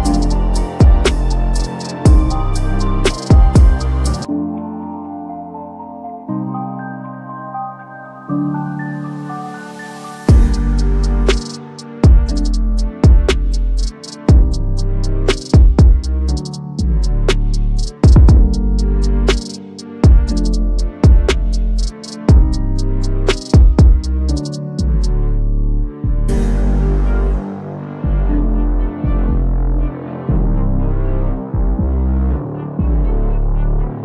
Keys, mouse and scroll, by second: 5.1 scroll up 1, 6.0 click, 7.6 click, 9.4 click, 12.5 click, 13.9-14.9 scroll down 1, 16.5-16.8 scroll up 1, 19.3 click, 20.9-22.7 drag.